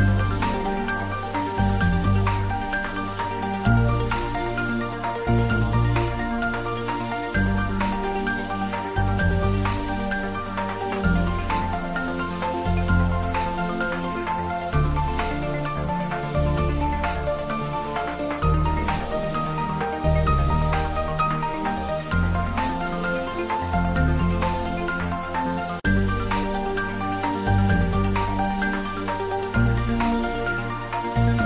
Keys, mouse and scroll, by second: 1.1 click, 2.2 ctrl+middle click, 2.5-4.2 shift+middle drag, 4.2 g, 6.0 click, 6.3 ctrl+s, 7.6 click, 7.9 ctrl+s, 8.1 ctrl+middle click, 8.4 Tab, 9.4 click, 11.0 r, 12.2 click, 12.5 ctrl+s, 13.5 ctrl+middle click, 14.2 ctrl+s, 14.4 ctrl+middle click, 14.8 shift+middle click, 15.3 ctrl+s, 17.4 ctrl+middle click, 18.2 ctrl+middle click, 18.7 click, 19.2 shift+click, 20.2 h, 21.0 right click, 21.2 ctrl+z, 24.4 x, 24.5 Left, 26.1 click, 27.4 ctrl+s, 27.9 ctrl+middle click, 28.2 shift+middle click, 28.7 ctrl+middle click, 29.4-31.0 middle drag, 31.0 shift+middle click.